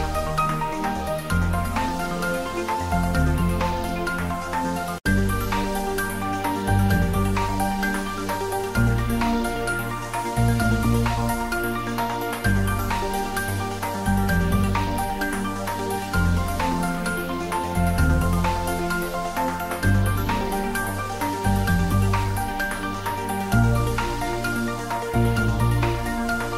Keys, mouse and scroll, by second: 2.0 click, 4.1-5.8 scroll down 1, 8.2 click, 9.4 Tab, 9.8 click, 12.3-12.8 middle drag, 13.6 click, 14.4 Tab, 15.0 click, 15.8 shift+click, 19.3-20.6 scroll down 1, 21.0 click, 23.3 Tab, 23.7-24.5 middle drag.